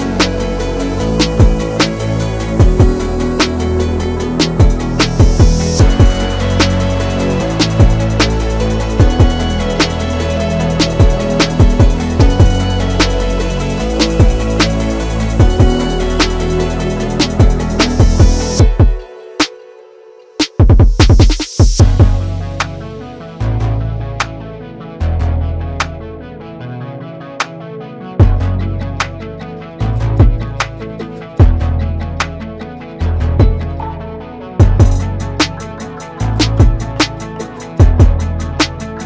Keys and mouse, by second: 1.5 1, 2.6 click, 4.1 shift+click, 5.1 s, 9.4 shift+middle click, 10.7 shift+middle click, 12.3 shift+middle click, 13.6 2, 14.1 click, 14.9 ctrl+r, 17.7 click, 18.2 ctrl+r, 20.1 alt+shift+click, 21.0 shift+click, 21.8 s, 26.3 g, 28.0 ctrl+b.